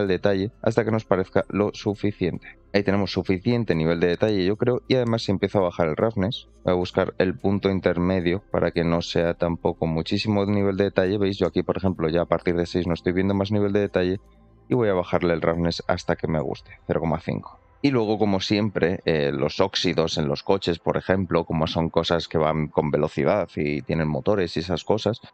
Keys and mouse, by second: 4.7 shift+click, 8.0 shift+click, 10.4 click, 12.9 click, 16.7 click, 17.7 ctrl+z, 18.1 middle click, 19.1 middle drag, 25.2 middle click.